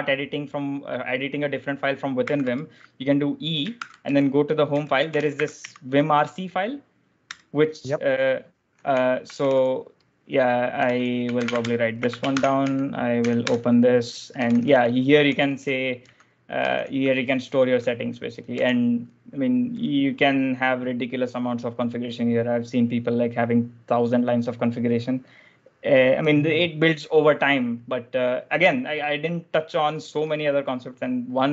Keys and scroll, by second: 2.0 e, 2.4 space, 3.7-6.0 typing, 7.2 Return, 8.4-18.9 typing.